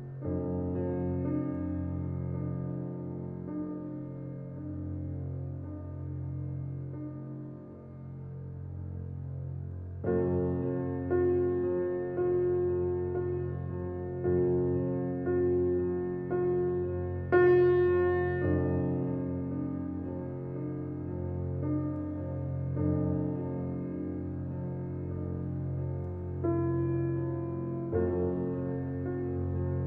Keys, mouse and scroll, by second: 2.2 alt+click, 3.2-4.5 drag, 11.3 ctrl+alt+scroll up 1, 13.4 ctrl+alt+scroll down 1, 14.0 ctrl+alt+scroll down 1, 14.2 space, 14.4 click, 14.7 space, 15.3 alt+click, 16.1 click, 17.8-22.4 drag, 23.1-29.8 alt+drag.